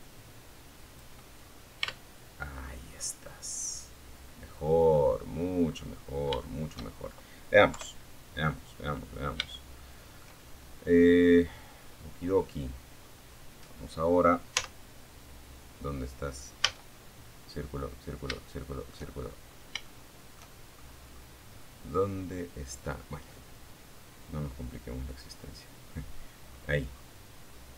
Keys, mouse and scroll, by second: 0.1 Tab, 0.8-1.1 scroll down 2, 1.2-3.3 middle drag, 3.6 scroll down 1, 3.9 scroll up 1, 4.6 shift+middle click, 5.8 KP_3, 6.9 scroll down 2, 7.7 shift+middle click, 9.7-10.0 scroll up 2, 10.4 scroll down 1, 10.9-11.6 scroll up 1, 12.7 z, 14.8 a, 16.5 shift+middle click, 17.3-17.8 shift+scroll up 3, 18.0 shift+middle click, 18.9-19.2 shift+scroll up 3, 23.2 click, 24.6-25.9 scroll down 1, 26.6 z, 27.4-27.7 scroll up 1.